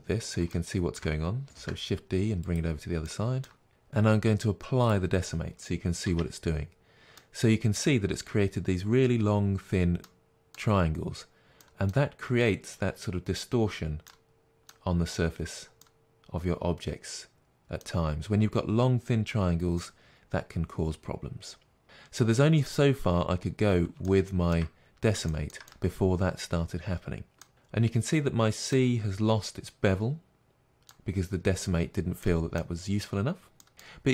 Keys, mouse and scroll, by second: 0.0-0.5 scroll down 2, 0.5-2.5 shift+middle drag, 1.7 shift+d, 2.5 click, 3.0 shift+middle click, 3.7 click, 4.9 click, 6.0 Tab, 7.2 middle click, 10.7-22.9 middle drag, 22.9-23.4 scroll up 2, 23.4-34.1 middle drag, 24.8 scroll down 1.